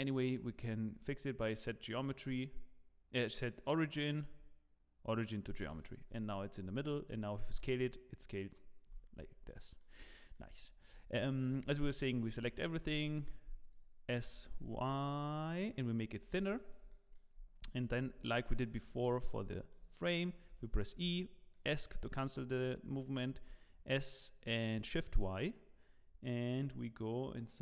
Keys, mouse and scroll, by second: 3.9 right click, 5.7 Escape, 6.3 middle click, 7.5 s, 9.2 scroll up 4, 9.6 middle click, 10.1 shift+middle click, 10.5-11.4 scroll up 7, 11.6 Tab, 11.9 a, 12.3 s, 14.2 s, 16.1-16.5 scroll up 3, 16.5 shift+middle click, 16.9 middle click, 17.4-18.2 scroll down 12, 18.2 shift+middle click, 19.1 middle click, 19.1 scroll down 1, 19.5 shift+middle click, 20.5 e, 21.5 middle click, 22.0 shift+middle click, 23.3 s.